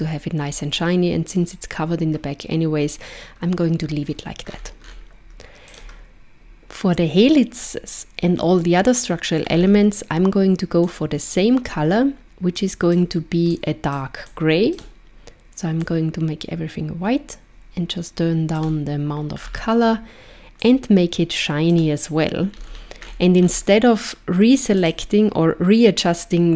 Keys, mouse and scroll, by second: 4.5-5.7 scroll up 8, 5.7 click, 9.5-10.9 scroll down 4, 10.9 click, 10.9-12.2 scroll down 1, 19.4-20.2 scroll down 6, 20.7 click, 22.5-23.6 scroll up 11, 24.8 click.